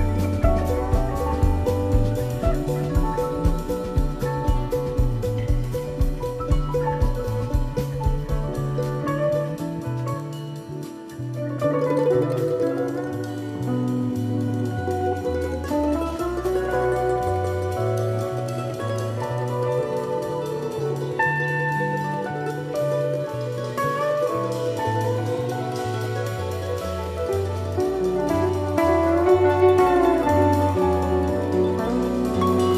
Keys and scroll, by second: 0.2 super+c, 0.5 super+f, 0.9 shift+Right, 3.4 super+c, 3.6 super+f, 4.0 shift+Left, 4.8 super+c, 5.1 super+f, 5.5 shift+Left, 31.2 super+c, 31.4 super+f, 31.9 shift+Right.